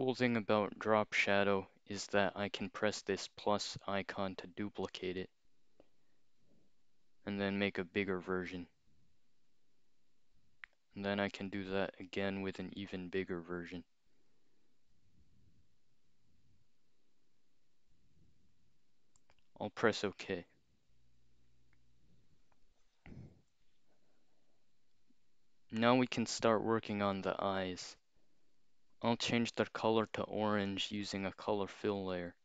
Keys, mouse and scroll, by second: 5.0 click, 8.0 click, 11.5 click, 14.1 click, 19.3 click, 19.8 scroll up 2, 26.2 scroll down 2, 28.6 click, 29.1-30.8 scroll up 2, 30.8 click.